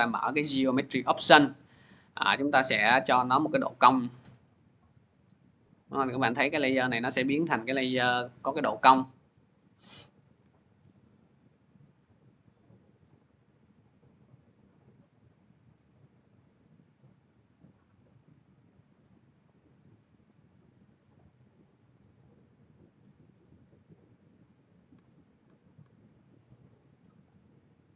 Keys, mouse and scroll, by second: 0.3-0.6 scroll, 3.5 click, 6.1-6.6 scroll, 9.3 scroll, 10.2 c, 12.9 click, 16.9 click, 20.0 click, 22.9 click, 24.8-25.6 typing, 27.1 click.